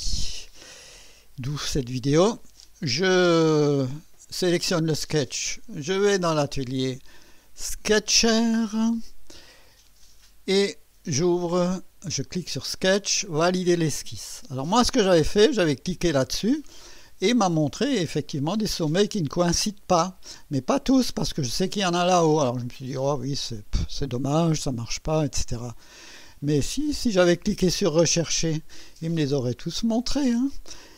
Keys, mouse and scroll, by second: 6.2 click, 8.1 click, 12.2 click, 13.8 click, 16.2 click, 27.9 click.